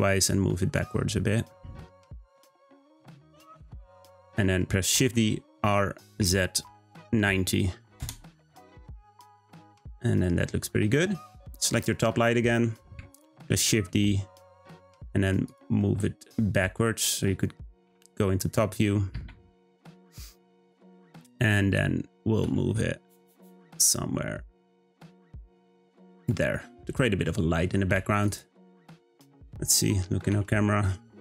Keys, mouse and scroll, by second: 4.9 shift+d, 10.7-11.7 scroll down 1, 11.7 drag, 12.4-13.3 scroll down 1, 13.5 shift+d, 15.8 middle click, 16.5-17.8 scroll down 4, 17.8 z, 19.5 `, 22.4 g, 26.5-27.9 middle drag, 27.9 g, 28.6 `, 30.2 g.